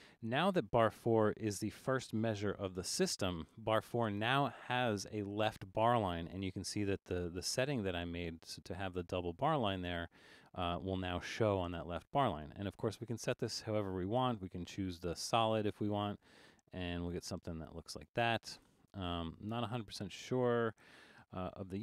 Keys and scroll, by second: 2.5 super+=, 2.8 super+=.